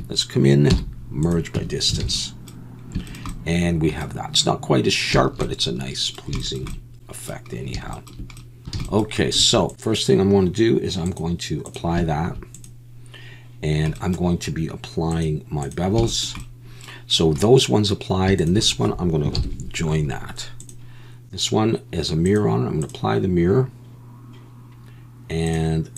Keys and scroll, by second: 0.7 m, 1.6 Tab, 2.0 alt+a, 8.6 Tab, 8.6 a, 19.4 ctrl+j.